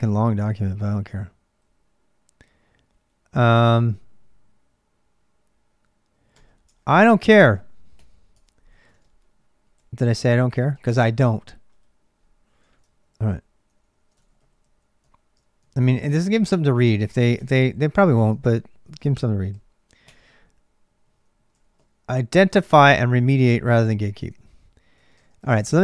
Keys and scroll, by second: 0.0-25.8 typing, 6.5 Return, 6.8 ctrl+[, 6.9 ctrl+j, 15.9 ctrl+[.